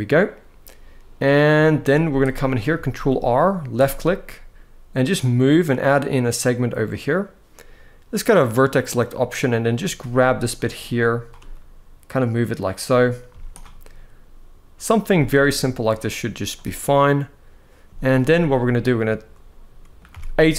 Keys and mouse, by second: 1.4 shift+middle click, 1.7 z, 2.6 ctrl+r, 6.1 click, 8.2 click, 8.9 click, 9.7 g, 10.3 click, 10.8 click, 11.1 g, 12.2 click, 13.0 z, 14.8 z, 17.6 z, 18.2-19.7 middle drag, 19.8 a.